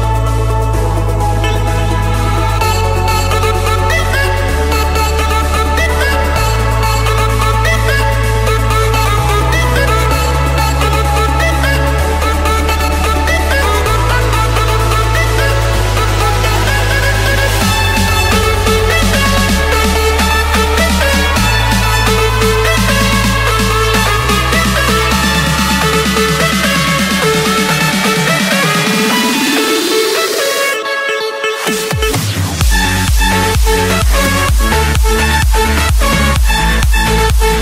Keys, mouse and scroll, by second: 0.1-1.2 drag, 2.6 click, 4.5-6.1 drag, 6.8-8.9 typing, 9.8 Return, 13.3-13.9 typing, 15.4 typing, 16.8 Return, 18.6 scroll, 19.6 click, 20.1 click, 22.0 click, 22.4 shift+click, 23.5 middle click, 23.7-24.5 scroll, 25.7-26.8 typing, 27.7 Return, 30.7-32.3 typing, 33.5 Return, 34.8 Escape, 36.9-37.6 drag.